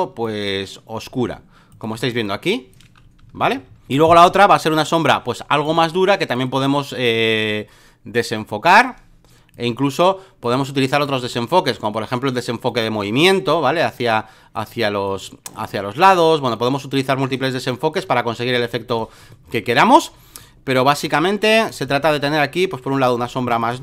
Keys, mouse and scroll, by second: 1.9 v, 2.2 click, 3.2 Up, 5.6-9.2 drag, 9.5-19.2 drag, 19.5 ctrl+t, 20.4-21.7 drag, 21.8-22.8 shift+drag, 23.4 Return, 23.6 click.